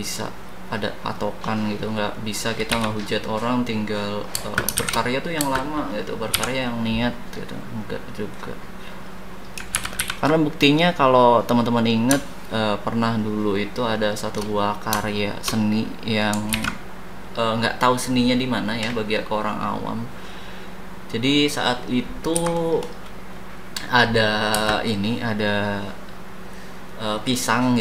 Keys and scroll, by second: 2.7 a, 4.4 space, 4.7 shift+s, 5.4 space, 6.3 d, 9.7 ctrl+c, 10.1 ctrl+v, 16.5 ctrl+z, 22.3 h, 24.5 space.